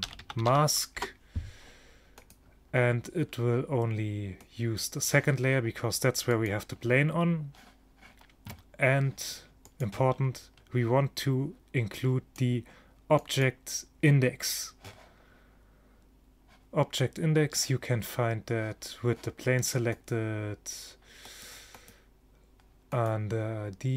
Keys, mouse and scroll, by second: 2.3-4.0 drag, 4.5-8.1 drag, 9.7-11.4 drag, 11.4 middle click, 12.0-15.1 drag, 20.0-23.9 drag.